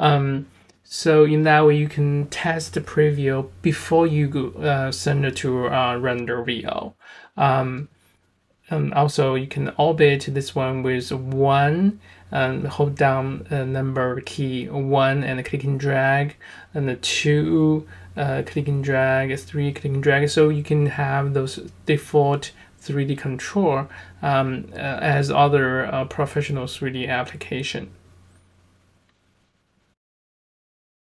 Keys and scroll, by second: 5.6 1, 10.7 2, 11.9 1, 17.8 3, 22.9 1.